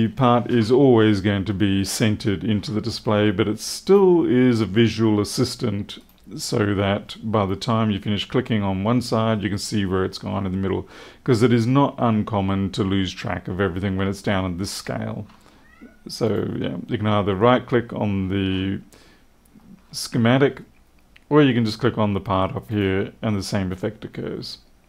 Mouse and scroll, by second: 3.8 right click, 5.9 right click, 14.5-14.9 scroll up 1, 16.2 right click, 22.6 click.